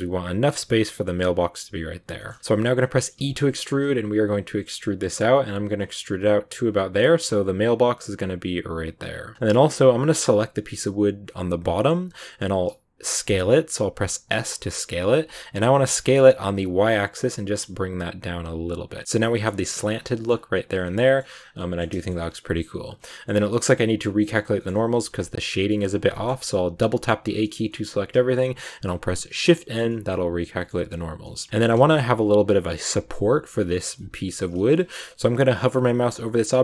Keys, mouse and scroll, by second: 2.1 shift+middle click, 2.3 g, 2.4-3.1 scroll up 2, 3.1 e, 9.2 scroll down 1, 9.3-10.4 middle drag, 10.4 right click, 12.1 middle click, 13.1 s, 18.9 scroll down 1, 19.0 middle click, 19.1 scroll up 1, 19.1 middle click, 19.8 scroll down 2, 19.9 scroll up 1, 19.9 scroll down 1, 20.0 middle click, 20.2 scroll up 2, 20.8-21.3 scroll down 3, 21.0 middle click, 21.5-23.2 middle drag, 23.2 scroll up 2, 23.3-24.4 middle drag, 24.4 scroll up 1, 24.5-26.3 middle drag, 26.3 a, 27.1 scroll down 2, 27.3-29.3 shift+middle drag, 29.3 shift+n, 29.8 middle click, 30.8 scroll up 2, 31.1 middle click, 31.5 a, 31.7-33.9 shift+scroll up 1, 33.9-36.6 shift+middle drag.